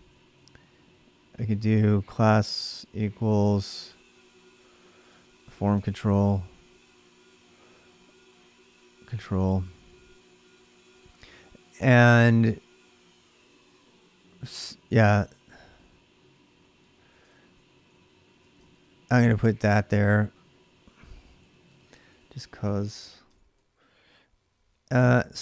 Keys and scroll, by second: 0.0-6.5 typing, 7.6-11.7 typing, 14.6-18.8 typing, 18.2 ctrl+[, 18.6 Return, 21.4-22.2 typing, 23.1 ctrl+[, 23.3-25.4 typing.